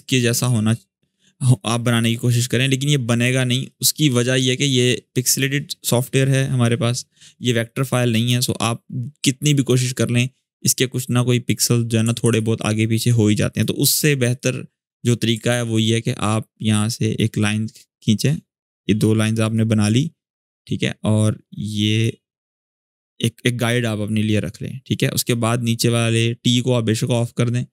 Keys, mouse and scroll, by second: 3.4-5.3 ctrl+drag, 12.0 ctrl+z, 12.8-13.4 click, 14.0 click, 15.2 ctrl+r, 15.8-17.1 drag, 18.0-18.9 drag, 20.4-21.9 drag, 22.5-25.1 drag.